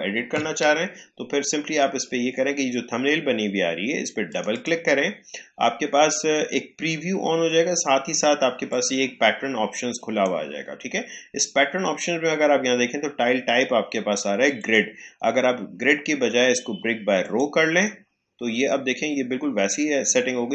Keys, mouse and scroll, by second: 4.2 click, 8.6-12.5 drag, 14.5 click, 17.2 click.